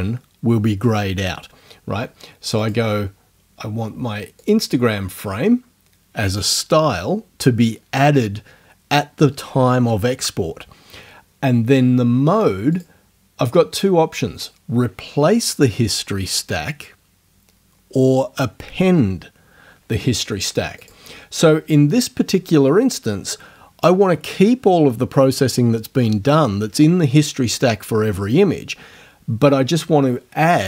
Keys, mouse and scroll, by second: 2.6 click, 4.4 click, 12.7 click, 20.8 click.